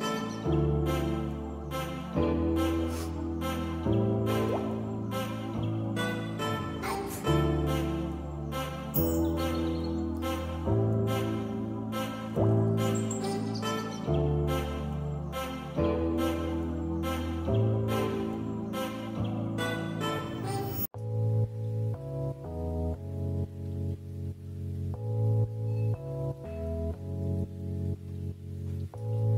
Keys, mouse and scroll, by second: 10.9 shift+a, 12.9-19.9 middle drag, 19.9 ctrl+s, 21.9-24.1 drag, 24.7 Tab, 26.1 a, 26.7 r.